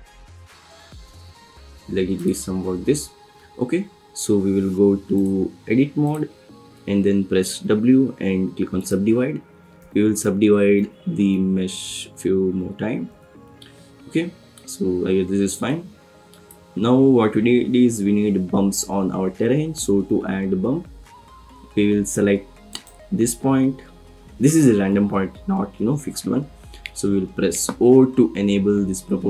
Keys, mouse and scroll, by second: 0.7 s, 2.1 click, 5.3-6.2 drag, 7.6 w, 9.7-11.8 typing, 13.0 w, 15.7 click, 16.8 Tab, 19.9 Tab, 22.7 click.